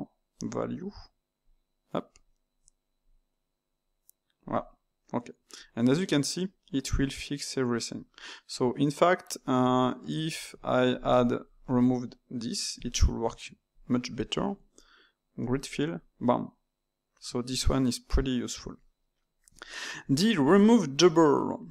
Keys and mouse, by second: 8.8-10.4 middle drag, 10.4 Tab, 10.9 click, 11.4 ctrl+shift+click, 12.7 x, 13.6 alt+click, 15.4-18.4 drag, 19.2-21.7 middle drag.